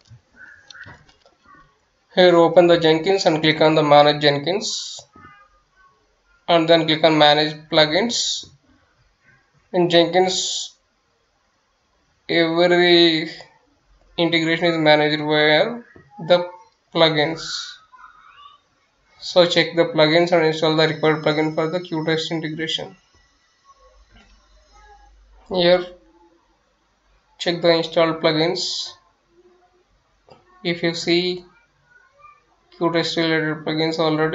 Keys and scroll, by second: 0.0-0.7 typing, 2.4 F9, 12.7 F9, 19.0 Return, 20.0 F9, 26.2-27.8 typing.